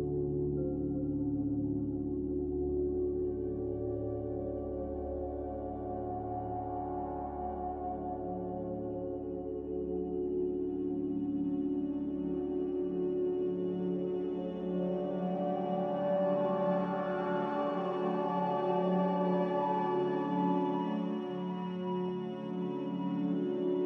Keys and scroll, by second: 1.1 typing, 1.4 Return, 6.0 a, 7.5 typing, 12.4 q, 16.9 q, 18.5 a, 21.6-22.6 typing.